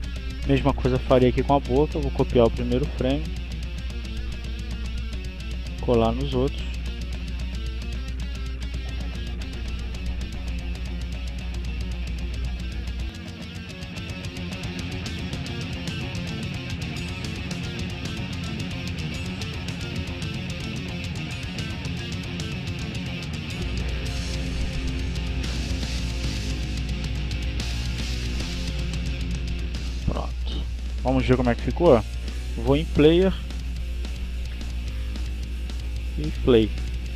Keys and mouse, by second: 0.9 right click, 2.0 click, 2.8 right click, 3.8 click, 4.6 right click, 5.3 click, 6.0 right click, 6.8 click, 8.7 click, 10.3 click, 12.7 click, 13.6 right click, 14.5 click, 15.4 click, 16.7-17.7 drag, 17.1 right click, 18.0 click, 19.0 right click, 20.0 click, 21.0 click, 23.3-24.7 drag, 25.5 click, 27.3-28.3 drag, 28.4-29.5 drag, 30.3 click, 30.7 click, 33.0-34.5 drag.